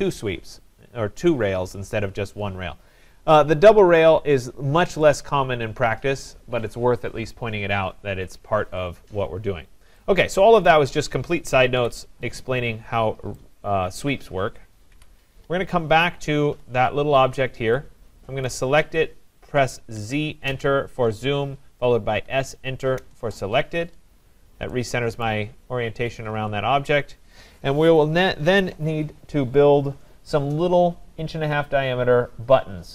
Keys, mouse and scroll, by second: 4.1 click, 4.6 scroll, 4.8 middle click, 6.2 right click, 7.6-8.7 scroll, 9.2 scroll, 10.6 click, 11.8 Delete, 12.8-13.7 scroll, 14.2 click, 15.0 Delete, 16.1-16.9 scroll, 18.4 click, 20.0 z, 20.5 Return, 20.5-21.8 scroll down 10, 22.3 s, 23.0 Return, 24.1 scroll down 4, 24.5 scroll, 25.2 right click, 25.5-26.2 scroll, 29.2 scroll.